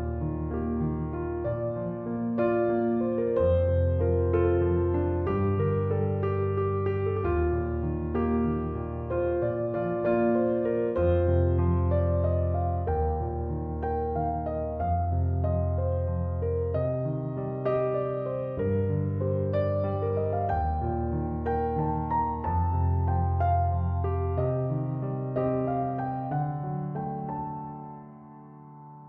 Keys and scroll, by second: 7.7 9, 8.0 0, 8.5 Tab, 10.3-11.3 typing, 21.4-22.4 typing, 22.4 Return.